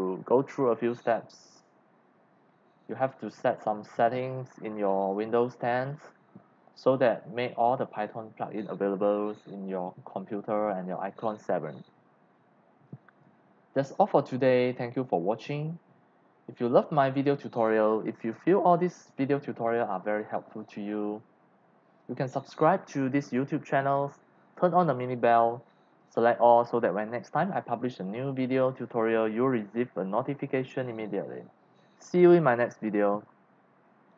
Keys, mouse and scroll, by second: 6.8 scroll down 1, 12.9 click, 13.8 scroll down 1, 15.4 click, 34.1 click.